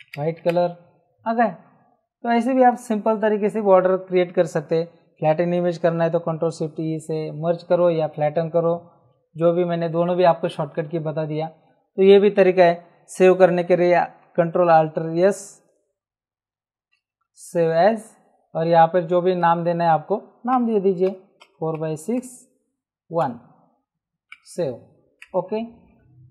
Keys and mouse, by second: 0.0 Return, 6.6 ctrl+shift+e, 16.5 ctrl+alt+s, 19.3 click, 20.5 BackSpace, 21.1 KP_4, 21.4 x, 21.7 KP_6, 22.2 KP_Subtract, 24.3 Return, 24.3 KP_Enter.